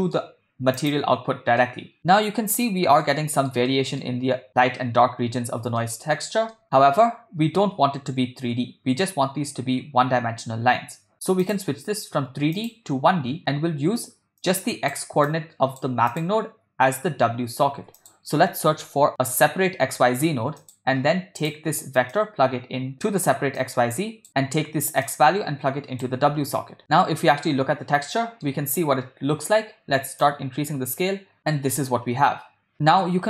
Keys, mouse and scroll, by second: 0.9 click, 1.7 middle click, 2.7-3.1 shift+middle drag, 3.2 middle click, 3.7 ctrl+middle drag, 5.8-6.2 ctrl+middle drag, 6.5 shift+middle click, 11.4-12.9 drag, 14.4-14.9 drag, 15.3-15.8 drag, 16.1 click, 17.8 shift+a, 22.1-22.9 drag, 23.6-24.3 drag, 25.1-26.2 drag, 26.8 shift+middle click, 28.2 middle click, 30.3-31.4 drag, 31.8-32.7 middle drag.